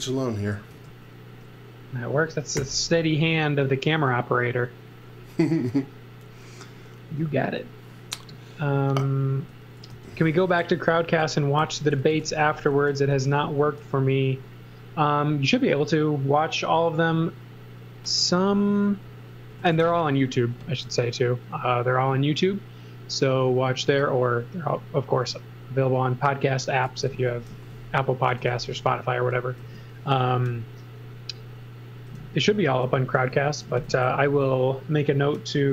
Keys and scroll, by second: 0.7 space, 2.5 g, 9.4 x, 9.9 v, 11.1-13.8 typing, 18.3 x, 19.5 x, 19.8 z, 20.8 l, 21.9 l, 26.6-28.3 typing, 29.6 l, 32.2 e, 32.7 space, 33.1 z, 33.6 m, 35.6 s.